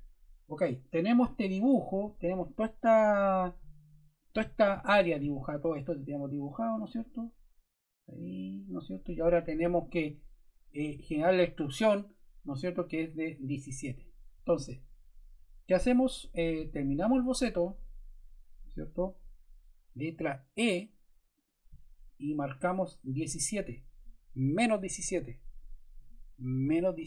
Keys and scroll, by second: 20.5 e, 26.9 1.